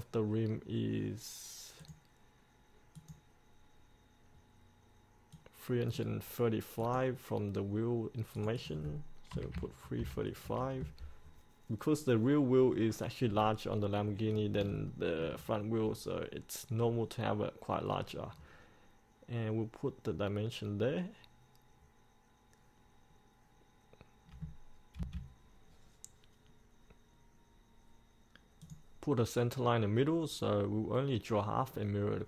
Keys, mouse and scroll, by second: 9.5 KP_3, 12.0-12.9 scroll up 1, 12.9-14.2 scroll down 1, 14.2-14.8 scroll up 1, 15.1 shift+middle click, 15.5 scroll up 1, 15.7 scroll down 1, 18.1-18.5 scroll up 1, 18.5 scroll down 1, 25.1 F8, 28.8-32.2 drag.